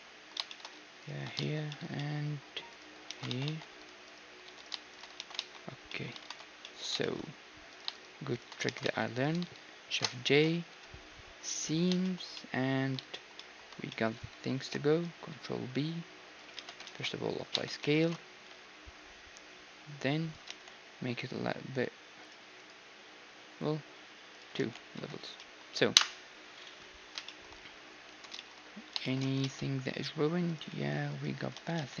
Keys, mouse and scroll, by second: 3.1 ctrl+e, 3.5 a, 4.5 a, 5.2 ctrl+e, 5.4-7.1 right drag, 5.7 middle click, 5.9-7.1 drag, 6.3 ctrl+s, 6.7-7.7 middle drag, 7.7-9.2 drag, 7.7-11.2 right drag, 8.7 ctrl+e, 10.0 shift+g, 12.2-15.7 middle drag, 14.6 ctrl+b, 16.6 Tab, 16.9 ctrl+a, 17.6 Tab, 17.7-19.9 middle drag, 18.0 ctrl+b, 20.5 t, 22.3-26.2 drag, 24.6 t, 25.0 Tab, 25.4-28.9 middle drag, 26.0 KP_1, 28.4 Tab, 29.7 ctrl+Tab, 30.5-32.0 right drag, 30.7 g, 31.6 ctrl+z, 31.9 ctrl+z.